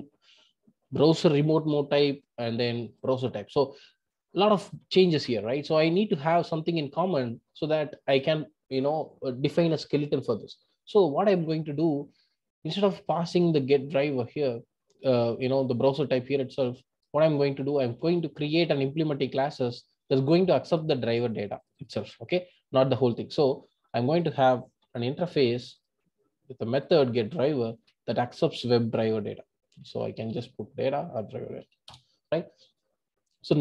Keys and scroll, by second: 27.6 super+v.